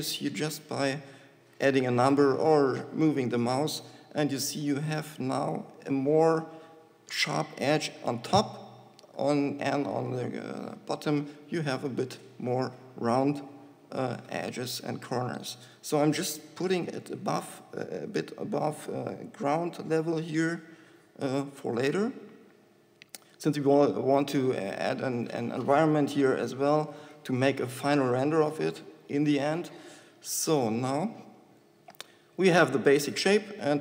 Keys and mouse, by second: 6.0 shift+Tab, 12.2 KP_1, 13.5 KP_5, 17.0 g, 24.7-25.7 drag, 25.7-28.9 middle drag, 28.9 KP_5, 29.3 KP_1, 30.0-32.5 middle drag, 32.5 Tab.